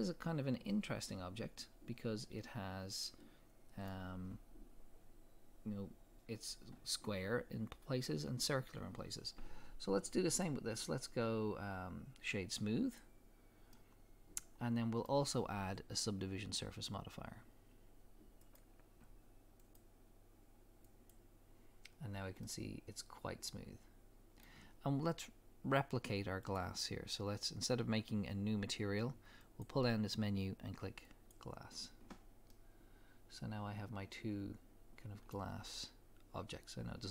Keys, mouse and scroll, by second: 0.2 scroll up 2, 3.1-10.2 middle drag, 10.2-13.7 drag, 13.7-18.4 middle drag, 18.4 click, 19.6-22.5 drag, 22.0-22.4 scroll down 2, 22.5-26.4 middle drag, 26.4 click, 29.4-32.5 drag, 32.5-33.2 middle drag, 33.7-37.1 middle drag.